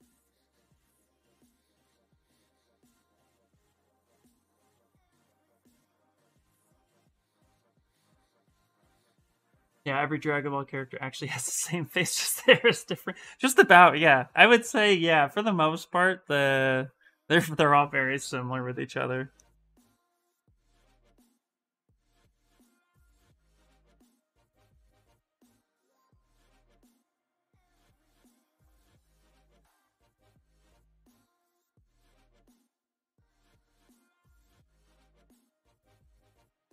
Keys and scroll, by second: 4.7 s, 20.5-22.0 typing, 30.6 ctrl+z, 30.7 ctrl+z, 31.0 ctrl+z, 31.1 ctrl+z, 31.4 ctrl+z, 31.7 ctrl+z, 31.9 ctrl+z, 32.4 s.